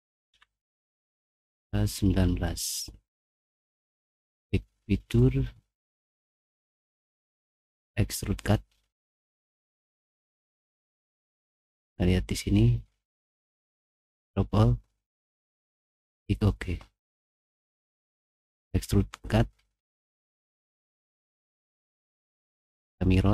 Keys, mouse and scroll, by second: 0.0-5.4 typing, 4.2 click, 5.5 middle click, 6.6 middle click, 9.3 middle click, 9.8 scroll up 2, 10.0 middle click, 10.2 middle click, 10.4 middle click, 10.6 middle click, 10.8 scroll down 2, 11.0 middle click, 11.2 middle click, 13.1 click, 14.0 click, 15.6 click, 18.0 click, 22.8 click.